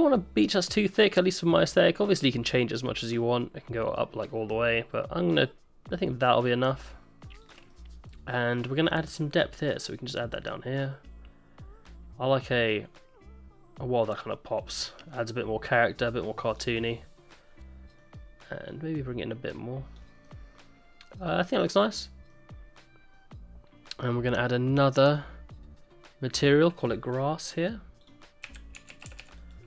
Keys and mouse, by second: 7.7 middle click, 9.9-16.6 drag, 17.1 middle click, 18.8-19.9 drag, 20.2 middle click, 21.2 middle click, 21.6 middle click, 22.0 middle click, 22.3 middle click, 25.0 click, 26.3 click, 28.0-29.5 drag, 29.2 s, 29.4 i.